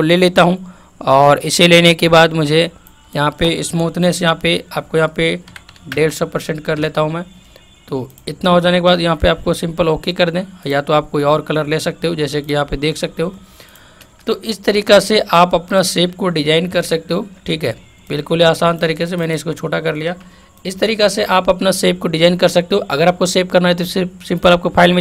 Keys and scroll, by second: 16.9 ctrl+t.